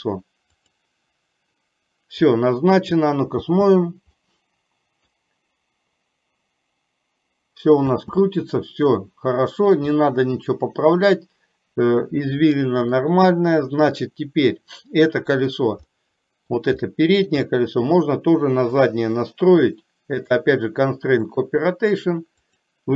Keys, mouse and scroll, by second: 3.6 space, 4.4-5.4 middle drag, 8.1 space, 8.5-10.1 middle drag, 10.5 middle click, 12.9 click, 16.0 middle click, 17.1 shift+middle click, 17.6 middle click, 18.9 click, 20.4-21.6 drag, 22.5 click.